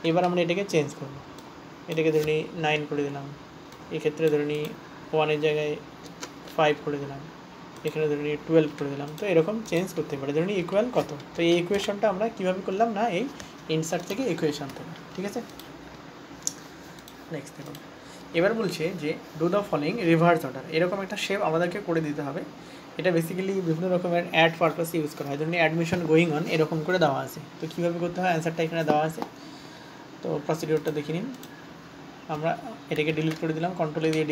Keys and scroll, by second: 12.1 shift+/, 33.5 ctrl+a.